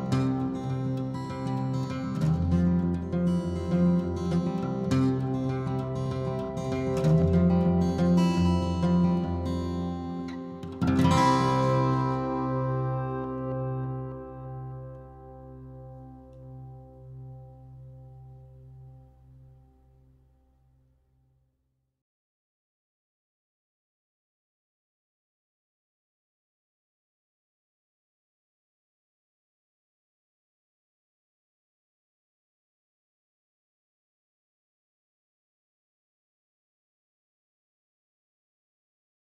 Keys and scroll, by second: 2.0 m, 7.6-9.8 typing, 10.1 Escape, 10.9 ctrl+g, 11.6 typing, 15.3 p, 20.0 Escape, 22.1 Escape, 22.3 Escape, 22.4 Escape, 22.9 ctrl+h, 24.5 Escape, 25.7 m, 28.6 p, 34.8 Escape, 36.1 h, 37.0 ctrl+g.